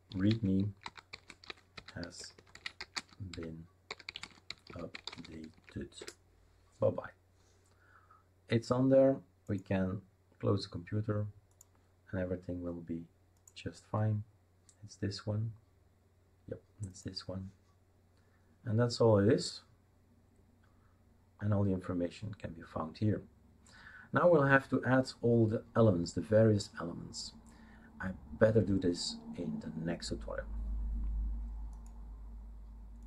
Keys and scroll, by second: 0.0-6.0 typing.